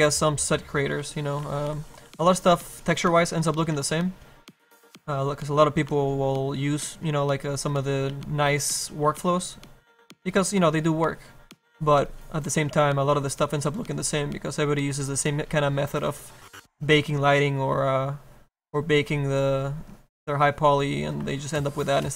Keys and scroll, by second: 0.1 s, 1.4 ctrl+z, 2.1 s, 3.7 s, 8.0 s, 9.0 s, 17.5 s.